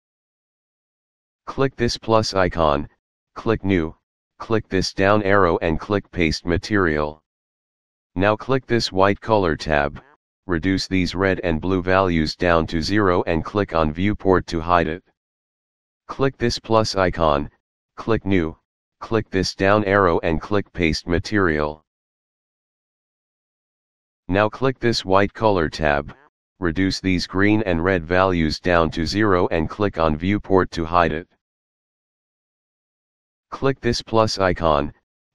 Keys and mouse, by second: 0.5 click, 2.2 click, 3.6 click, 5.6 click, 6.9 click, 9.3 click, 13.1 click, 17.3 click, 18.5 click, 20.4 click, 21.6 click, 24.2 click, 26.3 click, 29.9 click, 34.3 click.